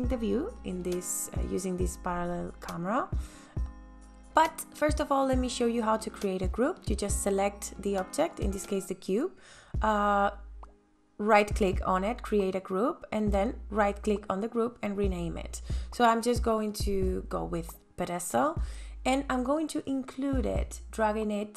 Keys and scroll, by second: 15.5-17.4 typing.